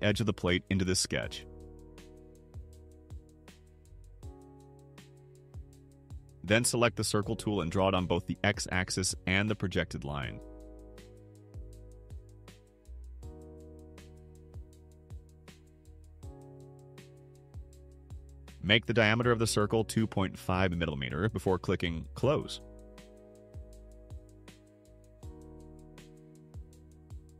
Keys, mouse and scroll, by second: 1.5 click, 4.6 click, 12.3 click, 16.6 click, 18.8 2, 19.4 ,, 20.0 5, 21.3 Return, 27.0 click.